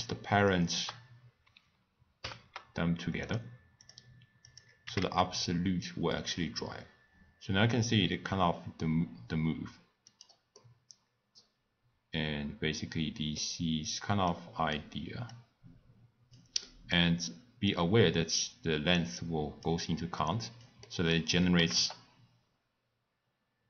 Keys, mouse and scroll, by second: 0.5 shift+click, 2.2 ctrl+p, 3.8 click, 4.4 click, 4.8 g, 10.5-13.6 middle drag, 14.3 click, 15.3-16.6 drag, 16.6-17.7 middle drag, 17.7 drag, 20.2 click, 20.8 middle click, 21.5 g.